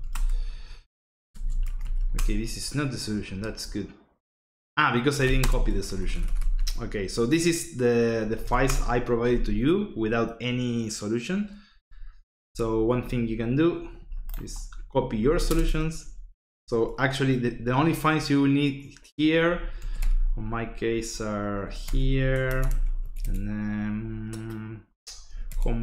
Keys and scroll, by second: 0.0-2.5 typing, 4.9-6.4 typing, 7.9-8.9 typing, 15.2 c, 15.4 space, 16.5 /, 19.3-20.3 typing, 21.3-22.4 typing, 22.7 Tab, 23.0 Tab, 23.2 Tab, 25.0-25.8 typing.